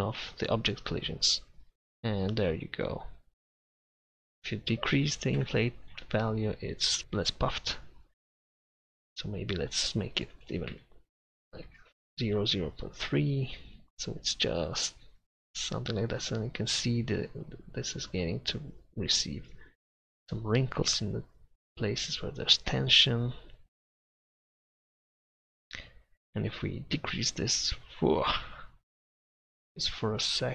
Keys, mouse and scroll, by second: 1.5 middle click, 4.6-6.1 drag, 9.3-11.1 drag, 13.7-19.5 middle drag, 21.8-25.0 middle drag, 26.9-30.3 drag.